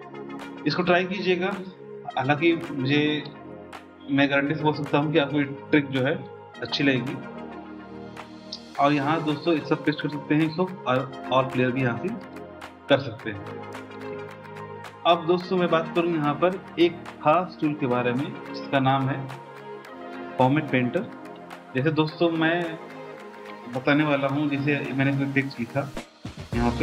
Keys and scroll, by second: 6.6 BackSpace, 26.7 typing.